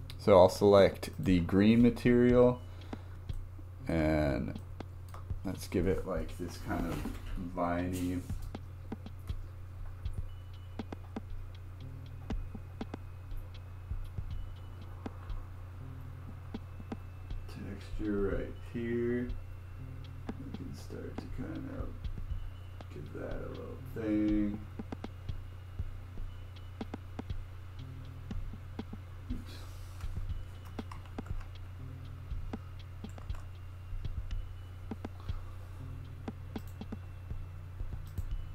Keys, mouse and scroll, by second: 1.1 click, 2.6-3.0 scroll up 3, 3.0-3.4 scroll down 1, 3.4 shift+middle click, 4.1 scroll up 2, 4.6 shift+middle click, 5.2 scroll down 1, 6.8-11.5 drag, 20.2-23.2 drag, 24.6-29.5 drag, 31.1 ctrl+z, 33.3 ctrl+z, 36.6-37.5 drag, 38.1 click.